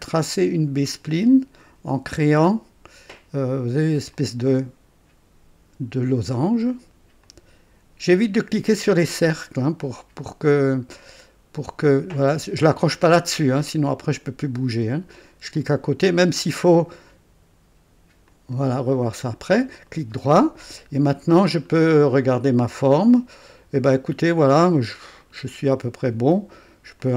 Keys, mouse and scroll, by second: 0.9 click, 4.1 click, 7.2 click, 11.0 right click, 15.5 click, 18.3 click, 19.8 right click, 21.0 scroll up 1, 21.5-21.8 scroll down 1, 21.9 right click, 25.2 right click, 27.0-27.1 drag.